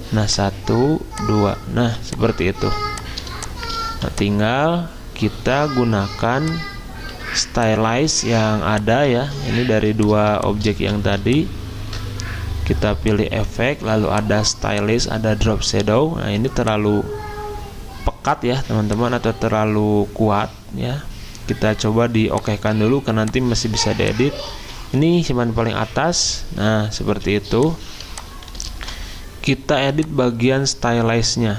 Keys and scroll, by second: 1.8 v, 2.6 z, 3.6-4.4 typing, 5.9 Delete, 7.1 Delete, 9.2 ctrl+z, 9.7-11.3 typing, 24.6 ctrl+z, 28.8 v.